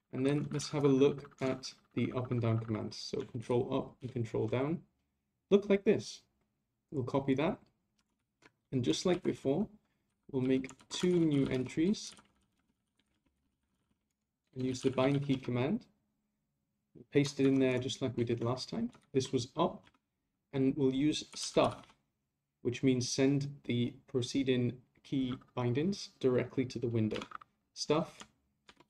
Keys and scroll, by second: 0.2 ctrl+Left, 3.4 ctrl+Up, 4.0 ctrl+Down, 8.2 shift+c, 9.1 ctrl+Right, 18.1 shift+v.